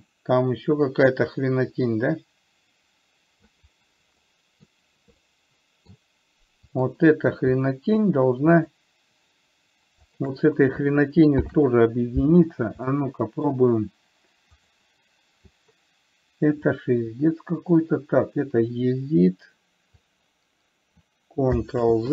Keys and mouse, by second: 4.6 middle click, 5.7-6.2 middle drag, 9.1 shift+click, 10.4 shift+click, 11.8 ctrl+j, 13.3-13.8 middle drag, 14.9 click, 17.1-20.4 drag.